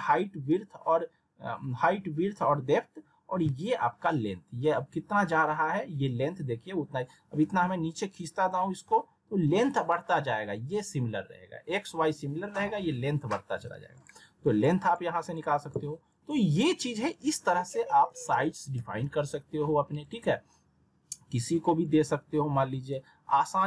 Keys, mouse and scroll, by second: 13.9 click, 17.9 alt+w, 18.8 z, 20.0 click.